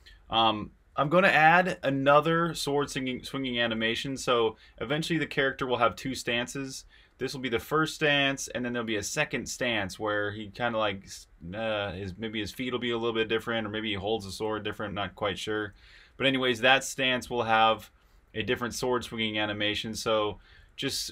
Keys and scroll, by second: 0.0-6.9 typing, 14.5-21.1 typing.